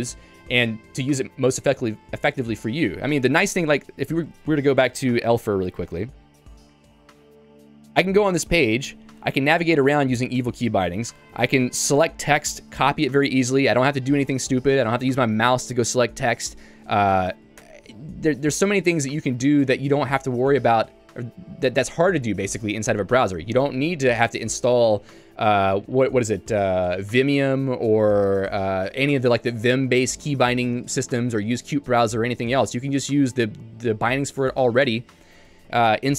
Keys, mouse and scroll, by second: 7.8 Return, 8.4 j, 10.4-11.9 typing, 17.5 click, 17.6 Escape, 18.3 j, 34.8 click, 35.5 ctrl+d, 35.7 ctrl+d.